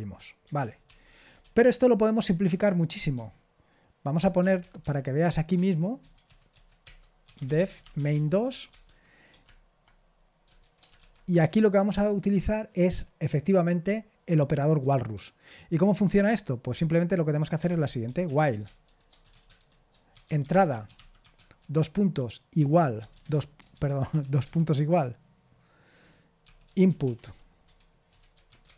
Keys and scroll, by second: 0.6 ctrl+p, 0.9 ctrl+p, 1.4 Return, 1.6 Return, 3.1-4.8 typing, 6.5-9.4 typing, 6.8 Return, 17.8-24.6 typing, 26.4-28.7 typing.